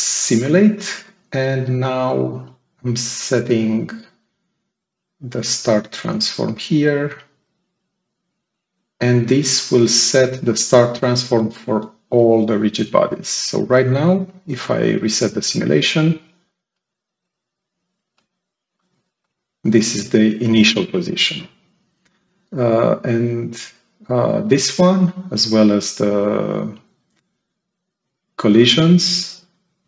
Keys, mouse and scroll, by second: 5.4 click, 16.6 click, 18.0 click, 18.7 click, 19.1 click, 19.5 click, 29.2 click.